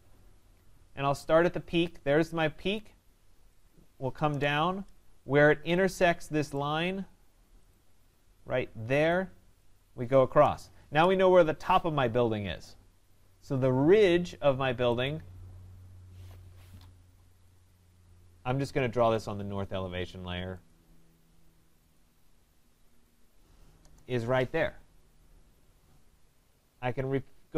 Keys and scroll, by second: 4.3 Return, 10.4 Return, 17.0 Escape, 23.8 Return.